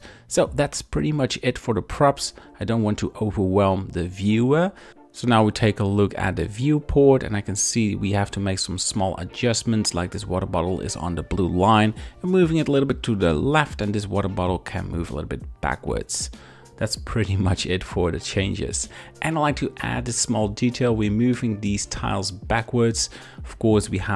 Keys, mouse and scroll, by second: 0.4 shift+click, 0.8 r, 2.0 KP_7, 2.6 z, 3.2 shift+middle drag, 3.7 r, 4.4 click, 4.6 g, 4.8 click, 10.2 click, 10.8 shift+middle click, 11.5 x, 12.4 click, 13.5 click, 14.0 shift+middle click, 16.4 y, 17.7 click, 17.8 3, 18.2 middle click, 18.8 e, 20.5 click, 20.9 shift+middle click, 21.5 click, 21.9 shift+click, 22.2 middle click, 23.2 shift+click.